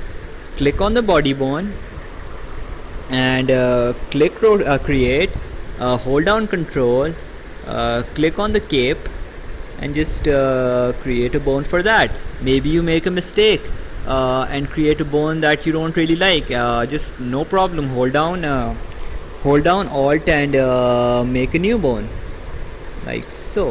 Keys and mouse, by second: 4.1 click, 8.4 ctrl+click, 10.3 click, 13.3 right click, 20.8 alt+click.